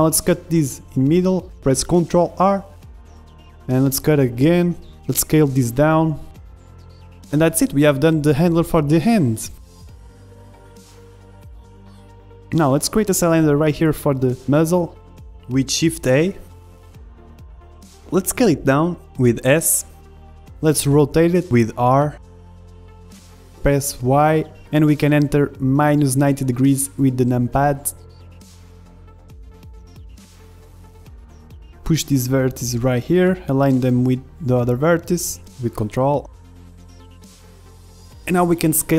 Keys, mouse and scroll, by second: 1.6 ctrl+r, 3.0 s, 5.6 ctrl+Tab, 6.5 a, 6.7 b, 7.2 s, 8.4-10.6 middle drag, 9.0 z, 9.9 Tab, 11.9 KP_1, 12.1 middle click, 12.4 middle click, 12.9 z, 13.2 middle click, 13.4 middle click, 14.0 click, 14.8 shift+a, 15.8 middle click, 18.0 middle click, 18.7 z, 19.2 s, 19.9-25.6 middle drag, 20.2 s, 22.7 r, 28.7-32.3 middle drag, 29.6 KP_1, 31.0 Tab, 32.0 a, 32.3 b, 33.3-35.5 drag, 35.7 a, 35.9 b, 36.9-38.8 drag.